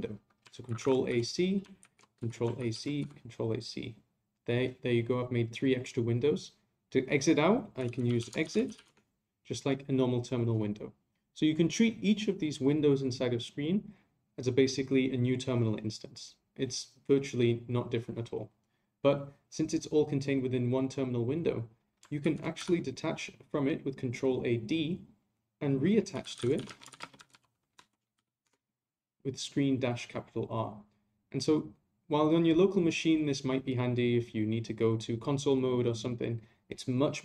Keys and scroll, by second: 0.7 ctrl+a, 1.8 a, 2.6 ctrl+a.